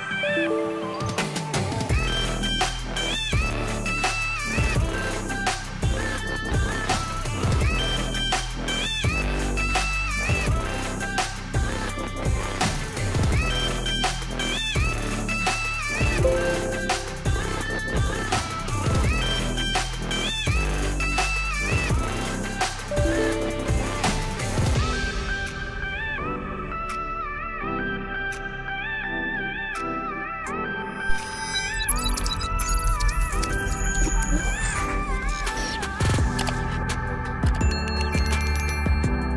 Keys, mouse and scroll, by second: 1.5 click, 3.7 click, 5.7 click, 6.3 click, 7.2 click, 8.2 click, 10.3 super+r, 11.7 click, 12.6 click, 13.5 BackSpace, 14.0 BackSpace, 17.9 click, 19.9 ctrl+a, 21.2 Delete, 24.4 click, 25.2 click, 27.8 click, 29.3 click, 30.0 right click, 30.8 click, 32.0 right click, 33.0 click, 34.6 click, 37.2 click.